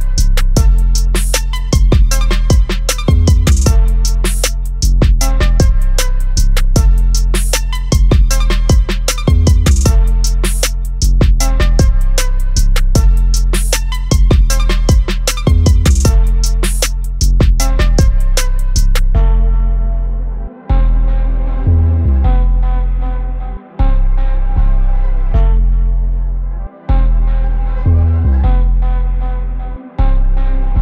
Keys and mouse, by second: 0.6 click, 6.8 click, 9.4 click, 11.6 click, 15.6 click, 18.6 click, 21.8 click, 28.8 click, 30.7 typing.